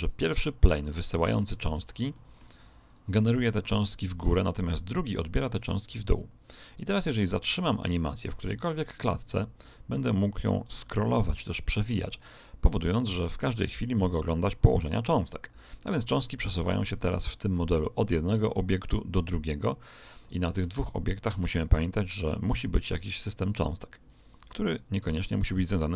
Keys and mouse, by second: 0.0 right click, 1.8 middle click, 2.8 right click, 7.6 alt+a, 8.9 click, 14.6-16.5 middle drag, 16.7-18.6 middle drag, 22.1 right click, 24.2 right click.